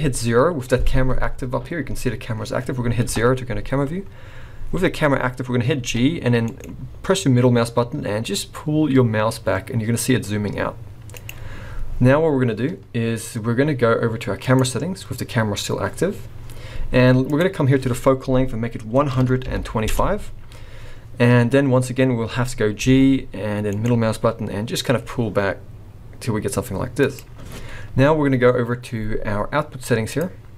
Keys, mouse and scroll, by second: 3.1 KP_0, 5.8 g, 14.4 click, 17.3 click, 22.8 g, 30.1 click.